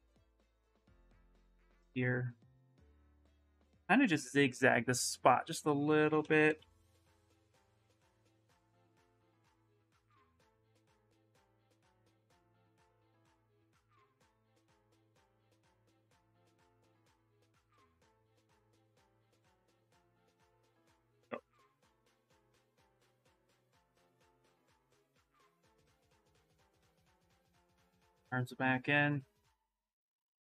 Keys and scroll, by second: 5.8 ctrl+shift+z, 6.0 ctrl+shift+z, 6.2 ctrl+shift+z, 6.6 ctrl+shift+z, 7.0 ctrl+shift+z.